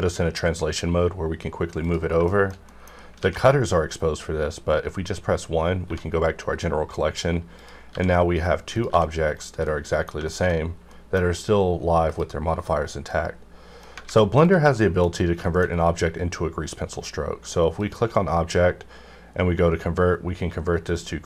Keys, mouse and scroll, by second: 2.0 click, 2.3 shift+middle click, 3.2 alt+a, 5.8 1, 6.5 middle click, 7.5 click, 7.6 click, 7.9 g, 8.3 right click, 8.7 click, 8.9 g, 9.3 right click, 9.6 middle click, 10.3 shift+middle click, 12.1 click, 13.1 middle click, 14.0 alt+a, 14.4 click, 14.4 click, 14.7 middle click, 14.8 middle click, 15.0 scroll up 2, 15.4 middle click, 15.7 scroll down 1, 17.8 click, 20.9 click.